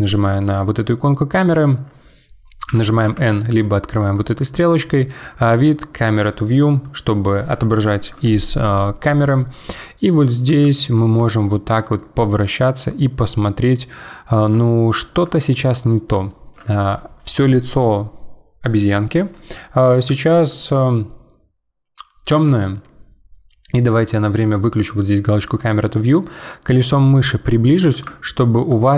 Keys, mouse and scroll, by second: 0.2 click, 2.7 n, 3.0 n, 4.0-6.0 drag, 9.4-11.6 middle drag, 11.6-12.0 scroll up 1, 12.0-15.0 middle drag, 15.1 scroll up 2, 15.3-19.4 shift+middle drag, 25.2 click, 26.7-28.2 scroll up 5, 28.2-28.9 shift+middle drag.